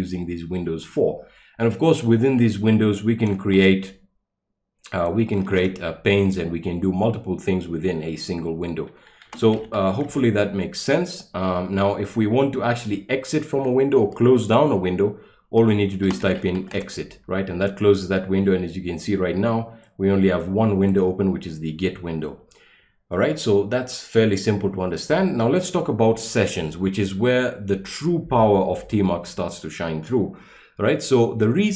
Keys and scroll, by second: 3.6 ctrl+b, 5.5 %, 9.0-10.2 typing, 15.8-17.1 typing.